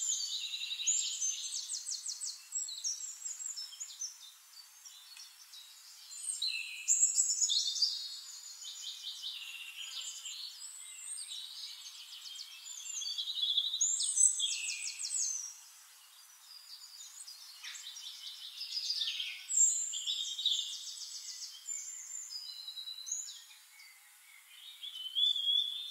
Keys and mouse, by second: 1.5 click, 2.5 click, 3.3 click, 3.9 click, 4.2 click, 5.8 click, 6.5 click, 6.9 click, 7.8 shift+-, 8.9 shift+-, 9.4 drag, 9.7 middle click, 10.0 middle click, 10.5 middle click, 11.4 click, 12.9 ctrl+d, 16.4 drag, 18.0 click, 19.2 drag, 20.0 drag, 20.5 click, 21.3 click, 22.6 click, 23.5 click, 24.2 middle click, 24.5 click, 24.8 click.